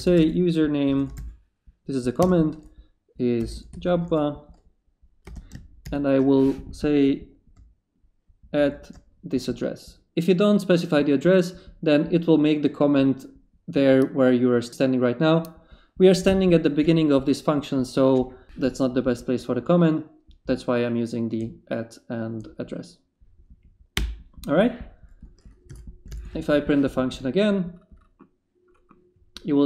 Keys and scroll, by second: 0.0-5.8 typing, 8.5 ctrl+shift+v, 20.4 Left, 21.4 Right, 23.9 Return, 25.7 p, 26.0 d, 26.3 Return.